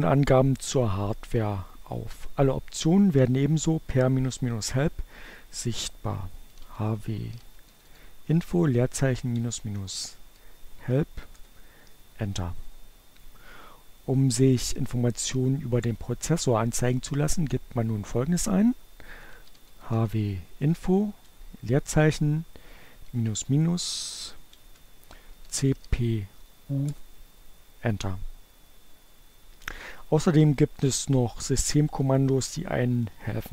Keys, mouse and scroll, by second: 4.7-9.5 typing, 10.1 Return, 17.3-20.0 typing, 21.9-24.3 typing, 25.2 Return.